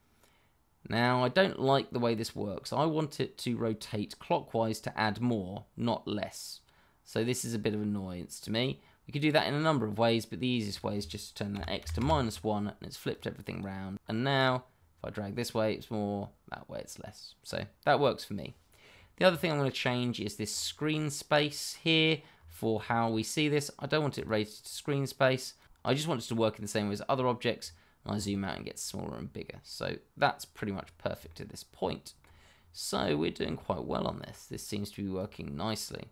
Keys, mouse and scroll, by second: 9.3 click, 11.5 -, 11.8 1, 11.9 Return, 13.9 click, 17.8-18.5 scroll down 1, 20.4-21.4 scroll up 1, 24.1 click, 27.6-28.1 scroll down 1, 28.1-28.5 scroll up 1, 29.1-30.4 scroll down 1, 31.2 shift+middle click, 31.3 middle click, 31.4 shift+middle click, 32.5-33.0 scroll down 1, 33.0 shift+middle click, 33.2 middle click, 33.2 shift+middle click, 34.6 click.